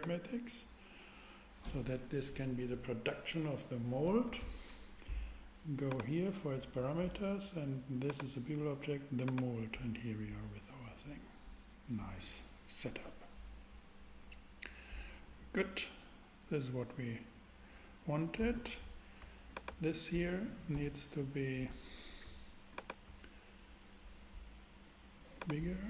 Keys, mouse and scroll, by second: 5.8-7.5 drag, 8.0-9.8 drag, 20.7 super+Tab, 22.8 click.